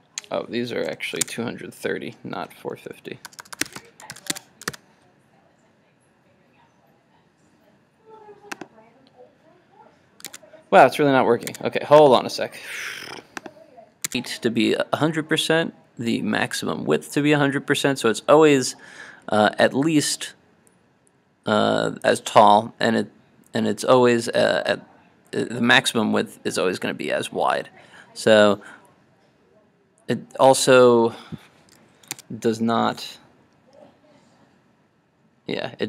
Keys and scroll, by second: 4.2 super+s, 4.5 super+Tab, 4.7 super+r, 11.0 super+Tab, 32.2 super+Tab.